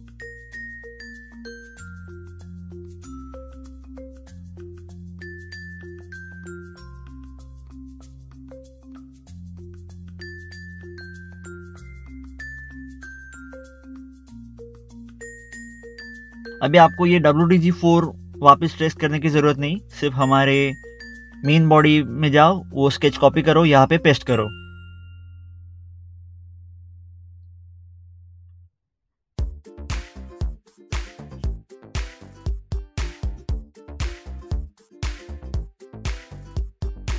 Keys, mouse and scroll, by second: 1.2 click, 2.8 scroll down 1, 4.0 click, 4.2 click, 5.5 scroll, 5.6 scroll down 1, 6.9 scroll down 1, 6.9 click, 7.4 scroll up 1, 7.8 middle click, 7.9 middle click, 8.2 click, 8.8 click, 9.2 click, 10.1 click, 11.5 scroll up 1, 12.5 middle click, 12.7 middle click, 14.3 middle click, 14.5 scroll down 1, 15.2 click, 16.9 click, 17.5 click, 18.6 scroll down 1, 21.4 scroll up 1, 24.7 scroll down 1, 24.8 click, 25.3 scroll down 1, 26.0 middle click, 26.3 middle click, 28.7 click, 30.2 click, 30.8-31.4 scroll down 1, 31.9 scroll down 1, 31.9 click, 33.6 ctrl+t, 34.6 ctrl+Tab, 35.9 scroll down 1, 37.0 ctrl+8.